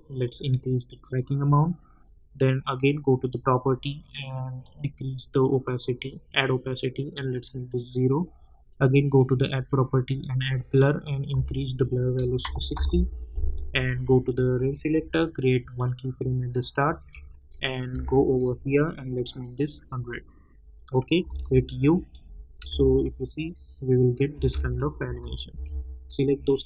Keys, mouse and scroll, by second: 4.6 click, 7.2-8.7 drag, 12.7 Return, 13.5 click, 17.0 scroll down 1, 17.5 scroll down 1, 17.9 k, 18.3 scroll up 1, 19.7 click, 21.2 u, 22.1 click, 22.6 space, 25.0 j, 25.8 click.